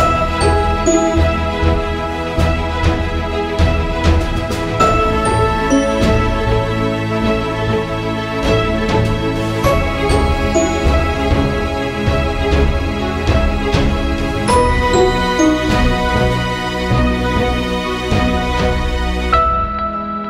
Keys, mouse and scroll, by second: 3.1 right click, 3.8 click, 5.6 ctrl+z, 6.2 click, 7.1 right click, 7.1 typing, 7.6 click, 9.8 click, 9.8 typing, 10.8 ctrl+c, 11.1 ctrl+v, 11.6-14.3 drag, 16.8 typing, 18.0-20.2 drag.